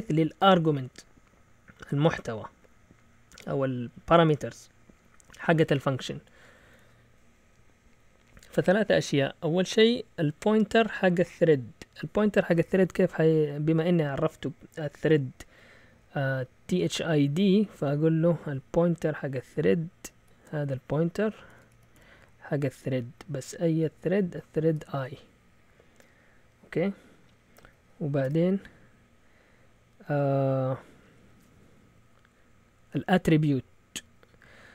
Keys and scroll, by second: 0.6-1.6 typing, 5.6 Up, 5.9-6.5 typing, 20.2 typing, 21.2-23.4 typing, 24.7 typing, 28.2 typing.